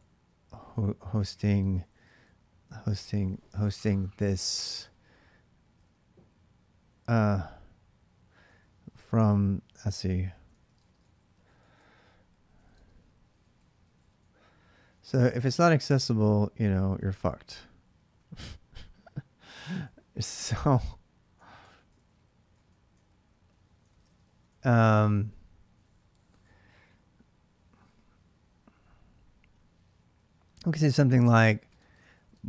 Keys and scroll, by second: 0.0-2.3 typing, 5.6-17.9 typing, 18.1 Return, 19.6-25.0 typing, 20.4 ctrl+[, 20.5 ctrl+j, 29.9 typing, 31.2-32.4 typing.